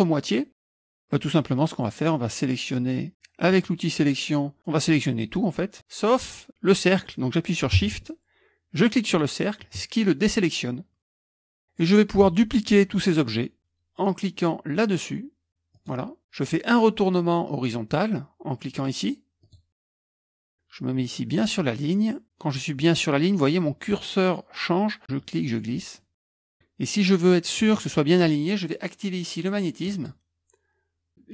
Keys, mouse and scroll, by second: 8.8 shift+click, 15.7 click, 19.4 click, 25.2-27.8 drag, 29.8 click.